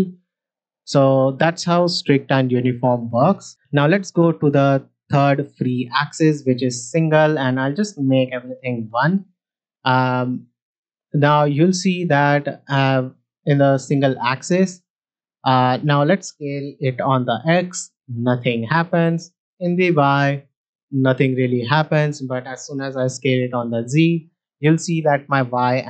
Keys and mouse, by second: 1.0-5.7 drag, 7.5-9.1 drag, 9.9 middle drag, 10.7 middle click, 11.2 shift+middle click, 11.6-11.9 middle drag, 12.5-12.9 middle drag, 14.5 middle drag, 15.2-15.6 middle drag, 16.8 s, 16.9 x, 18.7-19.7 right drag, 19.7 s, 21.6-22.7 right drag, 23.0 s, 23.1 z.